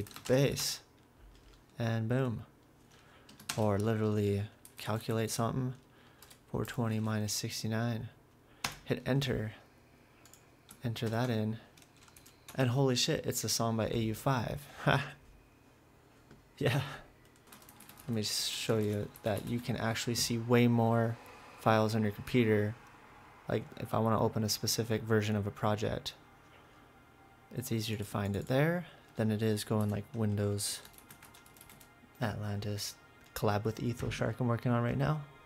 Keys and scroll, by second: 0.0-3.0 typing, 3.5 alt+space, 4.4-6.6 typing, 8.7 Return, 11.1 ctrl+v, 12.2 Down, 12.5 Return, 17.3-20.0 typing, 30.4-32.3 typing.